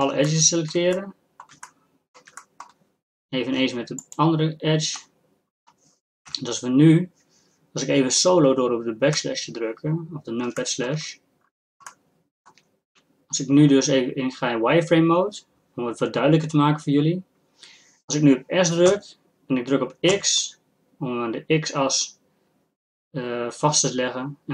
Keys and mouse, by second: 0.2-4.0 middle drag, 4.0-5.9 drag, 5.9 middle click, 6.3 KP_1, 9.2 KP_Divide, 9.9 middle click, 10.6-11.9 drag, 12.3-22.4 drag.